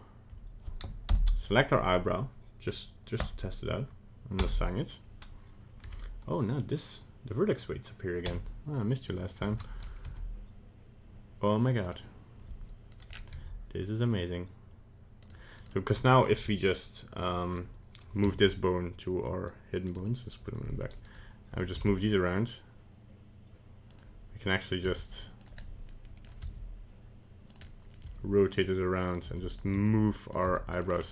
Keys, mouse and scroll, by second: 1.1 ctrl+l, 3.2 click, 4.4 Tab, 5.9 Tab, 8.3 Tab, 9.1 right click, 9.5 Tab, 9.8 right click, 10.0 g, 12.9 right click, 13.1 scroll down 3, 13.3 g, 15.5 right click, 17.1 click, 18.2 m, 21.0 right click, 21.8 g, 24.5 right click, 24.9 g, 25.6 middle click, 26.0 middle click, 26.4 r, 27.6 middle click, 28.1 g, 29.1 right click, 29.2 g, 29.8 r, 30.5 g, 30.9 scroll down 2.